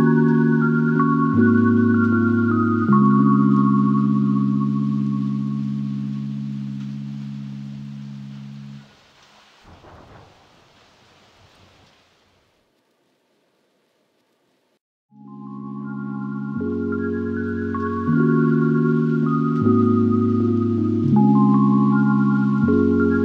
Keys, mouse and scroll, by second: 2.9 double click, 3.2 shift+click, 5.2-6.0 scroll down 5, 6.2-6.6 scroll down 10, 7.5 scroll up 1, 7.6 space, 7.7 middle click, 8.0 scroll up 2, 8.2 scroll down 2, 8.3 middle click, 9.0 scroll down 3, 9.2-9.8 scroll up 1, 9.8-10.7 typing, 10.2-10.7 scroll up 4, 11.6 middle click, 13.8 Return, 14.3 ctrl+z, 14.7 middle click, 15.0 Escape, 16.0 Return, 16.3 space, 17.1 middle click, 17.6-19.2 typing, 19.3 middle click, 19.6 scroll down 4, 19.9 scroll up 4, 20.3 middle click, 20.5 scroll down 2, 20.7-21.3 scroll up 2, 20.8 middle click, 21.3 typing.